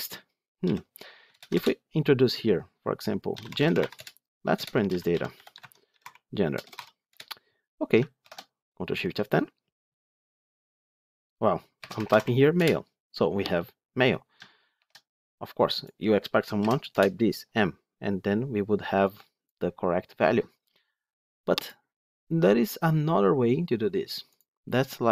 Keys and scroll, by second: 1.2 alt+Return, 5.5 Tab, 6.9 Return, 8.1 Return, 8.2 ctrl+shift+F10, 14.7 ctrl+shift+F10.